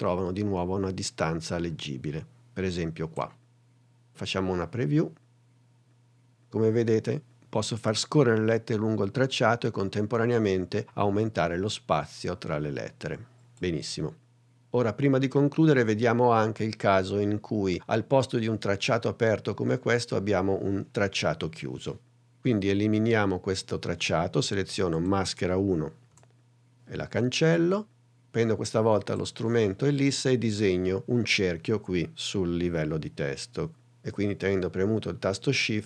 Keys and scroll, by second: 4.9 space, 26.2 BackSpace.